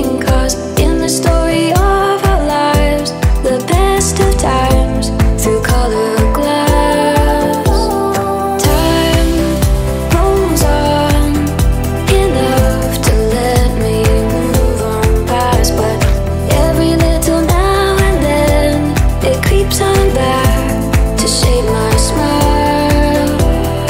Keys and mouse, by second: 0.4-2.4 drag, 2.4 shift+right click, 3.6 g, 5.4-5.7 drag, 5.7-6.7 middle drag, 6.7 click, 7.7 click, 8.9-10.2 middle drag, 10.2 click, 11.9 click, 12.4-15.4 middle drag, 15.4 click, 19.4-21.2 middle drag, 21.2 BackSpace.